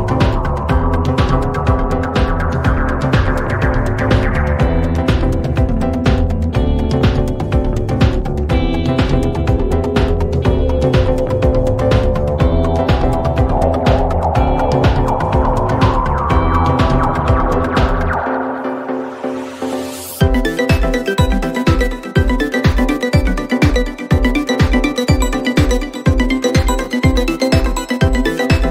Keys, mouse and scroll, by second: 1.8 click, 3.0 click, 3.8 click, 4.7-6.6 drag, 7.3 click, 7.8 click, 9.2 click, 13.3 click, 14.3 click, 15.6 click, 16.7 click, 18.3 click, 19.3 click, 20.7 click, 21.9 click, 23.3 click, 24.4 click, 26.0 click, 27.3 click.